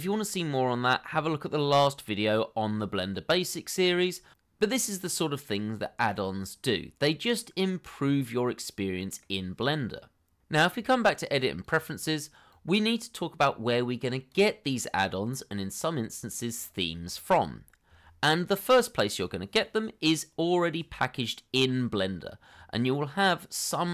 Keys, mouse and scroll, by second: 5.6 middle click, 21.5 scroll down 1, 22.4 scroll up 1.